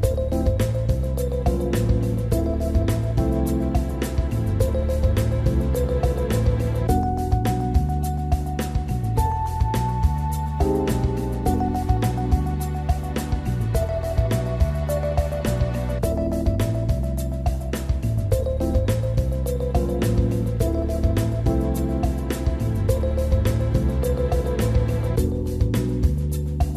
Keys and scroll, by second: 21.2 Delete, 25.2 Delete.